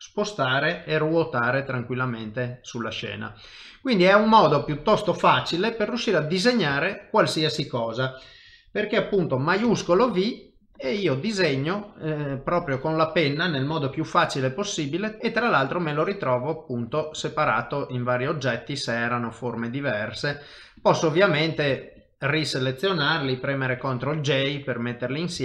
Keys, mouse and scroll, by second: 0.8 r, 1.4 middle click, 5.9 KP_7, 6.8 shift+middle click, 9.7 shift+v, 10.1 click, 14.2 shift+v, 14.7 middle click, 15.2 shift+middle click, 17.2 click, 21.7-22.7 shift+click, 22.4 click, 23.8 ctrl+j, 24.2 middle click.